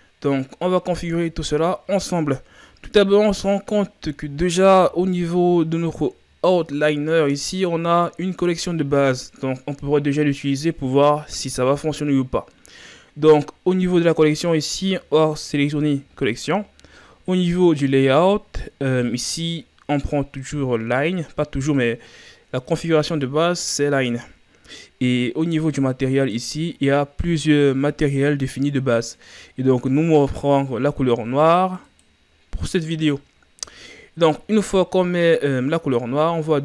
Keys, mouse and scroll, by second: 0.9-1.7 ctrl+scroll down 6, 14.5-31.3 drag, 35.5-36.2 shift+scroll down 5, 36.2-36.6 scroll up 5.